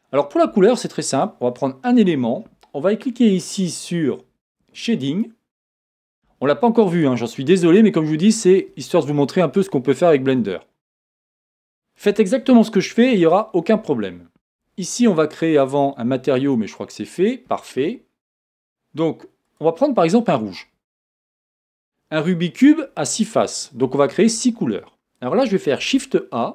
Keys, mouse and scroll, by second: 1.1 click, 5.6 click, 9.4 click, 10.8 click, 17.0 click.